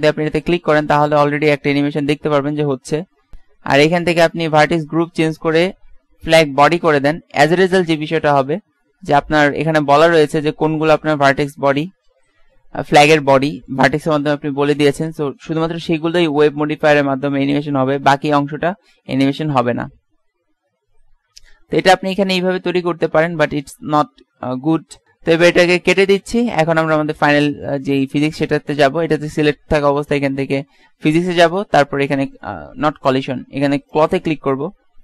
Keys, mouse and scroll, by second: 0.2 alt+a, 4.6-6.6 drag, 9.8 KP_1, 12.6-14.8 middle drag, 18.0 alt+a, 22.7 Escape, 26.3-27.3 drag, 30.1-31.7 drag, 32.4 click, 34.1-35.0 drag.